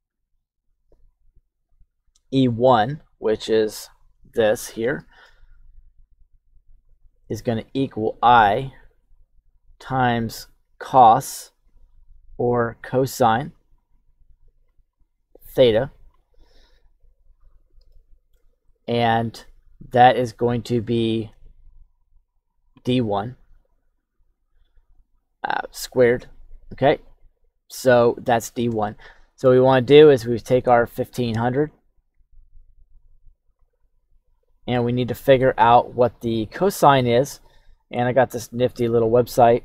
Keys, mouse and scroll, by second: 0.5 click, 1.1 click, 2.5 click, 5.7 click, 6.8 click, 7.3 click, 7.8 click, 8.4 click, 9.2 click, 9.6 click, 10.0 click, 10.5 click, 11.1 click, 11.9 click, 12.7 click, 13.9 click, 14.9 click, 15.8 click, 17.9 shift+middle click, 22.5 click, 23.1 click, 24.9-27.7 drag, 28.8 shift+middle click, 30.6 click, 31.3 click, 32.1 click, 32.7 click, 33.8 click.